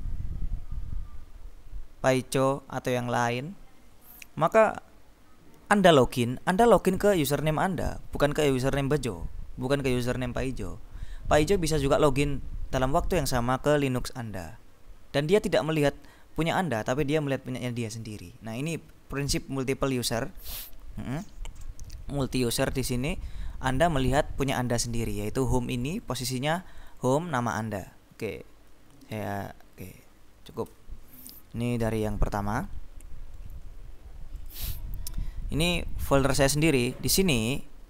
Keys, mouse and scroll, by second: 4.6 click, 21.0-21.5 scroll down 2, 21.8-22.4 scroll up 2, 22.4-22.8 scroll up 1, 23.0 click, 25.9 click, 26.9-28.1 drag, 29.4 click, 31.0 alt+Tab, 32.3 click, 33.5 right click, 34.4 click, 37.0 click.